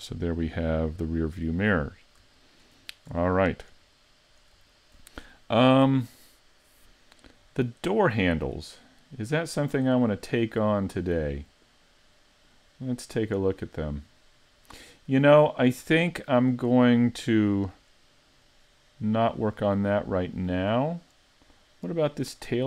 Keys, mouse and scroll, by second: 0.1 middle click, 2.0-2.4 scroll up 1, 2.4 shift+middle click, 2.8 scroll up 3, 3.3 shift+middle click, 4.0 middle click, 4.7 shift+middle click, 8.8-9.6 scroll down 3, 9.6-9.9 scroll down 3, 9.9 middle click, 10.6-11.1 scroll up 4, 11.1 middle click, 12.1-12.5 scroll up 2, 12.5 middle click, 13.5-14.1 scroll up 2, 14.1 middle click, 19.7-20.4 scroll down 1, 20.4 middle click, 20.4-21.5 scroll down 2, 21.5-22.4 scroll down 1, 22.4-22.6 scroll down 10.